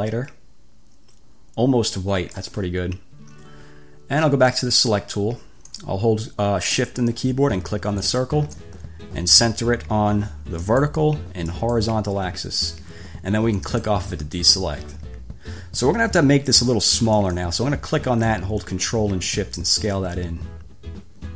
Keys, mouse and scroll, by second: 4.9 click, 8.2 shift+click, 10.8 click, 11.7 click, 13.9 click, 17.5 click, 18.8 ctrl+shift+click.